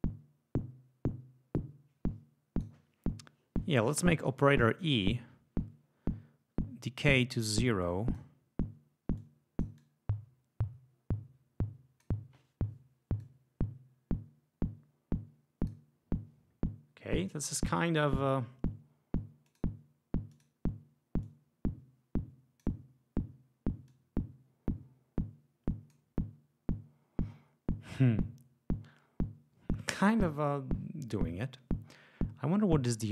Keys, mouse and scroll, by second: 7.7 click, 9.1-12.1 drag, 13.1 click, 19.4 click, 20.2 click, 21.2-22.7 drag, 23.8-26.0 drag.